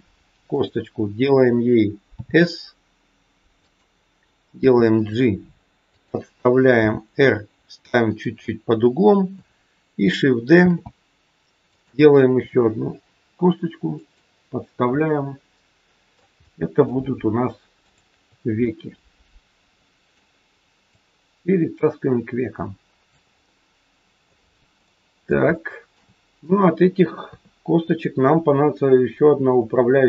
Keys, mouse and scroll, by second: 2.1 s, 4.5 g, 6.7 r, 10.5 shift+d, 12.4 r, 14.8 middle click, 16.4 middle click, 17.8 shift+click, 18.6 middle click, 20.8 click, 23.4 middle click, 24.8 middle click, 25.5 shift+middle click, 25.6 shift+middle click, 27.2 KP_3.